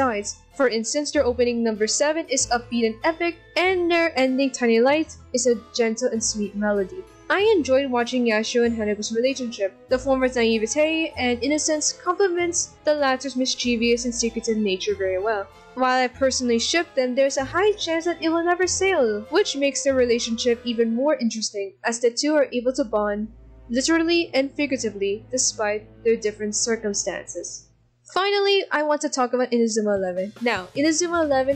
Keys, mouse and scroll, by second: 1.9 ctrl+=, 2.4 b, 5.2 scroll up 1, 5.9 ctrl+-, 6.1 ctrl+-, 13.0 right click, 13.5 right click, 15.7 ctrl+=, 16.2 ctrl+=, 16.7 ctrl+=, 19.2 ctrl+=, 26.0 right click.